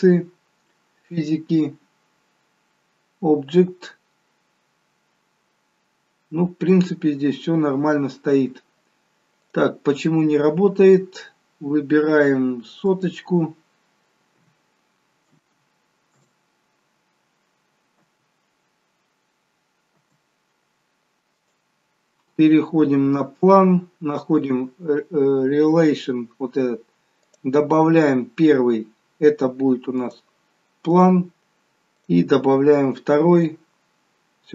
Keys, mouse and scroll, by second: 0.9-1.2 scroll down 1, 2.2 scroll down 3, 4.6 scroll down 4, 6.8-8.2 scroll up 9, 9.4 click, 9.4 scroll up 2, 12.8 click, 15.5 0, 17.9 space, 21.3 click, 22.6 scroll down 2, 24.4 click, 24.4-26.2 scroll down 6, 27.9 scroll down 1, 29.9 click, 29.9-30.2 scroll down 1.